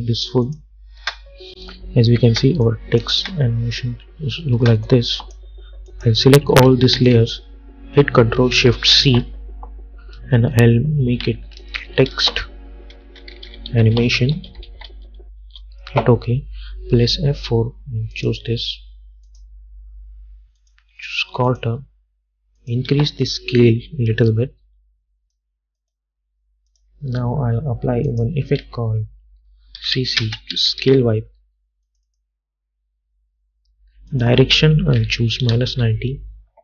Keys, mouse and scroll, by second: 1.1 space, 2.8 click, 3.3 space, 5.0 click, 7.1 ctrl+a, 7.2 ctrl+click, 9.1 ctrl+shift+c, 11.6-15.5 typing, 15.5 Return, 17.3 F4, 18.3 click, 23.0 s, 23.6-25.9 drag, 28.7 ctrl+a, 29.9-30.9 typing, 32.0 click, 35.1 -, 35.8 Return.